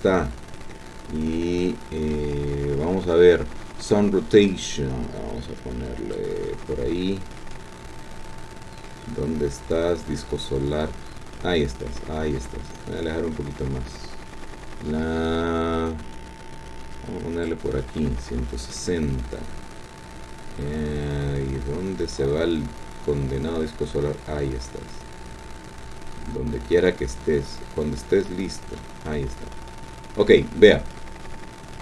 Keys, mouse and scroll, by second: 1.5 middle click, 4.5-6.3 drag, 7.0-7.6 scroll down 1, 7.6-10.8 middle drag, 10.8-12.2 drag, 12.5-13.2 scroll down 2, 15.3-17.6 drag, 18.3-19.1 scroll down 3, 19.1-29.0 drag, 30.3-30.9 scroll up 2, 30.9-31.7 scroll up 1.